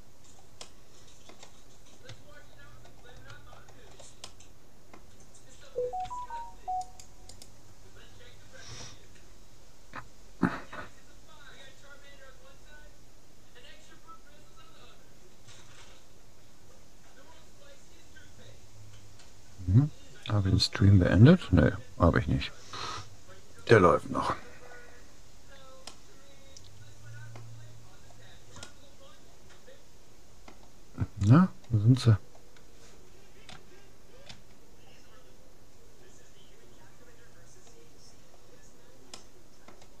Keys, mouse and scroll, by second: 1.0-2.4 middle drag, 2.4-3.6 scroll down 1, 3.6-4.0 scroll up 1, 4.0-6.0 middle drag, 6.0 c, 24.8-27.6 middle drag, 27.8-28.8 scroll down 1, 28.8-30.4 middle drag, 31.2-32.8 scroll up 1, 32.8 middle click, 33.6 a, 34.4 a, 38.2-40.0 middle drag.